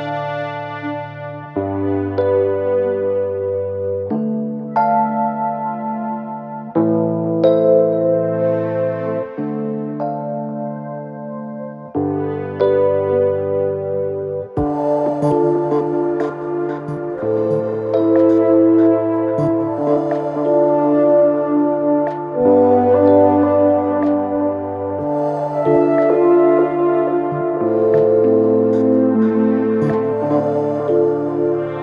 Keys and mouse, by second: 0.3-4.9 drag, 4.1 s, 4.9-12.4 middle drag, 7.9 KP_1, 8.0 KP_3, 9.1 shift+d, 10.0 r, 12.4-27.3 drag, 25.5 KP_1, 26.1 z, 26.9 shift+d, 27.3-31.8 middle drag, 27.6 r, 29.5 g, 30.4 e, 31.2 z.